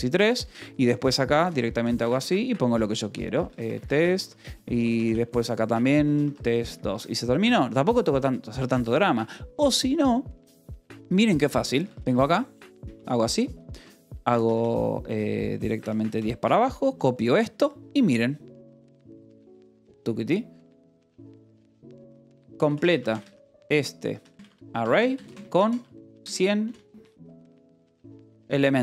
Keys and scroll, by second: 0.0-2.0 typing, 3.4-7.1 typing, 3.7 Escape, 11.9 k, 13.2 shift+v, 14.3-17.0 typing, 22.1-28.8 typing.